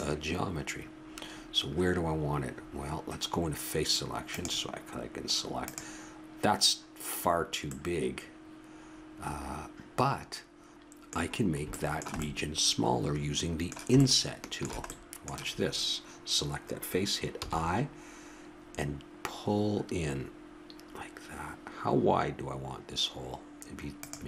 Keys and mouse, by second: 2.0 middle click, 2.5 middle click, 4.0 middle click, 4.3-7.5 drag, 7.8 middle click, 10.1 middle click, 14.4-16.5 middle drag, 17.3 i.